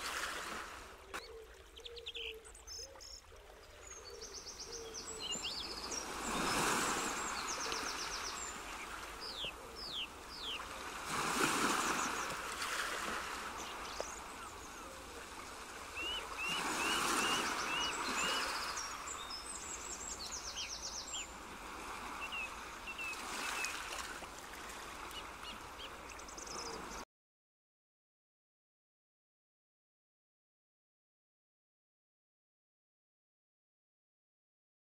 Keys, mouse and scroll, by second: 0.1 g, 1.6 click, 3.0 g, 4.6 click, 6.0 g, 7.7 click, 8.5 g, 10.0 click, 11.5 g, 13.6 click, 14.9 g, 16.9 click, 17.4 f, 18.9 g, 20.7 click, 21.7 g, 25.0 click, 27.0 middle click, 28.6 z, 29.2 z, 31.4 middle click, 32.5 Tab, 33.1 ctrl+2, 33.9 click.